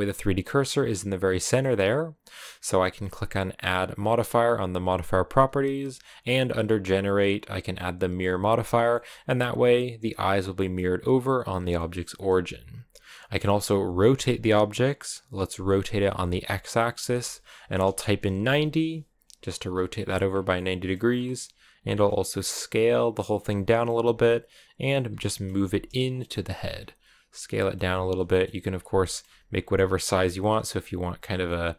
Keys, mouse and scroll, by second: 1.2-8.1 middle drag, 8.6 scroll down 1, 8.7 middle click, 9.0 g, 10.4-11.4 middle drag, 11.4 scroll down 1, 11.6 middle click, 12.0-13.5 scroll up 1, 13.5 r, 20.1 scroll down 2, 20.4 middle click, 20.9-21.6 scroll up 2, 21.6 s, 23.5 middle click, 23.8 g, 25.0 middle click, 25.4 g, 26.0 middle click, 26.5 s, 27.4 middle click, 27.6-30.7 typing, 28.1 middle click, 28.8 middle click, 29.6 middle click, 31.1 scroll down 1, 31.3 middle click.